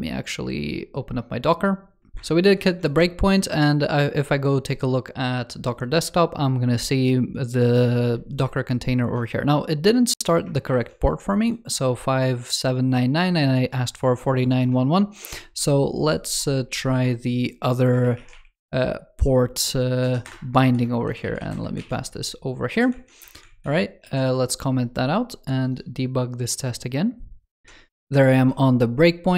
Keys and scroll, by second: 20.7 ctrl+s, 21.1 super+c, 21.6 super+v, 23.4 super+/, 23.8 super+s.